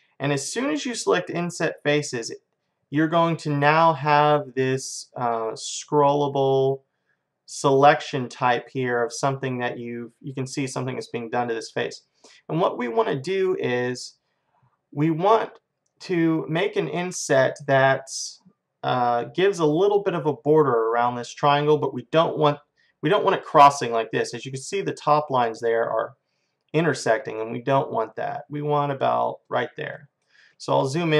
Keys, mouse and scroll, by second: 30.0-31.1 middle drag.